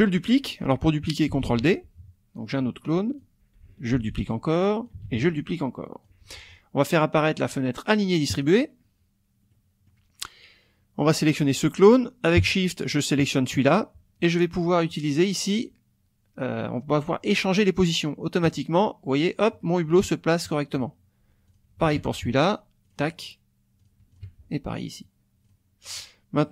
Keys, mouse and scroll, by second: 1.4 ctrl+d, 2.5 click, 3.9 ctrl+d, 4.3 ctrl+click, 5.0 ctrl+d, 5.4 ctrl+click, 8.3 click, 9.5 middle click, 11.0 click, 12.8 shift+click, 18.5 click, 21.5 shift+click, 21.9 shift+click, 22.9 click, 23.8 click, 24.1 shift+click, 25.5 click, 25.9 click.